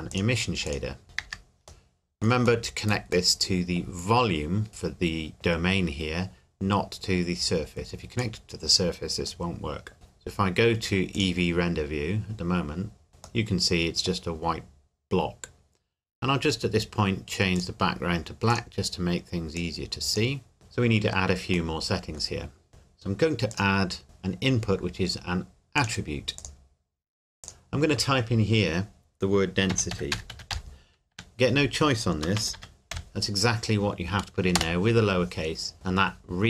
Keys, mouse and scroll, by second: 0.1 click, 1.0 scroll up 1, 1.2 n, 2.4-3.0 scroll up 1, 3.3 middle click, 4.0-5.3 scroll up 1, 8.2 click, 11.3 click, 13.4 middle click, 17.5 click, 20.5-21.7 scroll down 1, 21.7 middle click, 23.5 click, 25.7 click, 25.8 click, 29.7-31.1 typing, 32.2-32.9 typing, 34.5 Return.